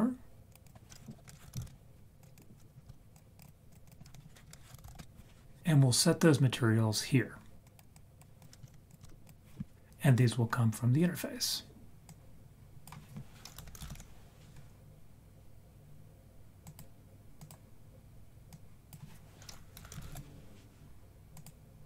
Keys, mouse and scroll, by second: 0.5-1.6 drag, 1.3 BackSpace, 2.2 click, 3.4 drag, 3.8 click, 4.5 BackSpace, 4.9 BackSpace, 7.6 click, 7.9 click, 8.4 click, 8.7 shift+d, 9.0 shift+d, 12.0 click, 15.0-17.4 drag, 18.5 click, 21.5 click.